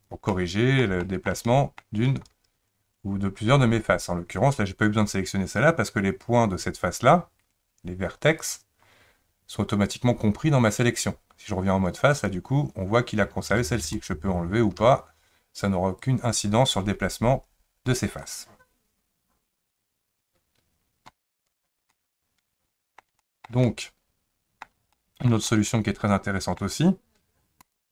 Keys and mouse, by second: 0.3 middle click, 1.0 shift+middle click, 1.5 middle click, 8.4 click, 12.1 click, 16.1-18.2 drag, 21.9-23.0 middle drag, 23.2 shift+middle click, 23.6-24.6 middle drag, 24.9 shift+middle click, 25.5-26.6 middle drag, 27.7 click.